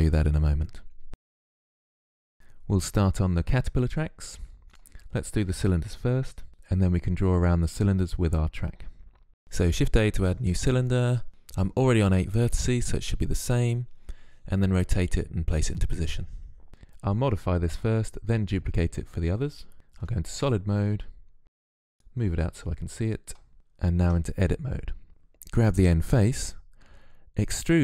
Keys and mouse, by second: 1.1 z, 4.5-6.3 drag, 9.3 shift+a, 12.7 r, 15.5 s, 16.7 ctrl+z, 19.8 z, 20.4-23.5 drag, 23.9 Tab, 25.1 ctrl+z, 27.7 e.